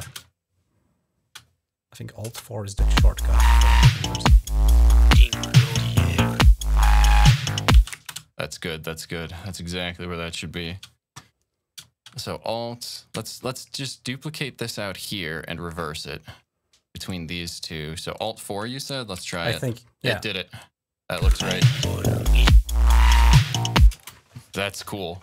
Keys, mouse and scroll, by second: 0.1 shift+scroll up 2, 0.8 shift+scroll up 3, 2.0 click, 2.1 space, 7.8 shift+space, 8.3 shift+scroll down 2, 9.0-9.3 scroll down 2, 10.1-10.6 scroll down 3, 11.7 scroll up 2, 12.7 click, 13.2-16.3 ctrl+drag, 16.9 right click, 18.0 click, 18.3 click, 19.1 alt+4, 20.5 click, 21.0 space, 23.8 space, 24.5 shift+scroll up 2, 25.0 shift+scroll up 2.